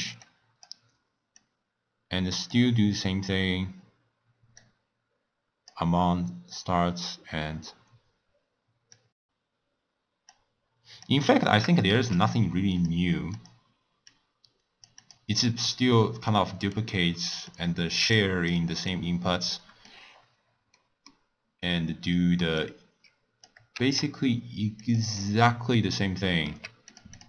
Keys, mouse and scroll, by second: 0.2 click, 1.4 click, 4.5 click, 8.9 click, 10.3-12.0 drag, 12.0 shift+d, 13.3-16.5 drag, 16.5-17.5 middle drag, 17.5 click, 18.1 click, 19.5 middle click, 20.0-20.7 scroll down 7, 20.7-22.5 middle drag, 22.5 drag, 23.9 shift+d, 25.2 middle click, 25.5 scroll up 4, 26.5 g, 27.1 click.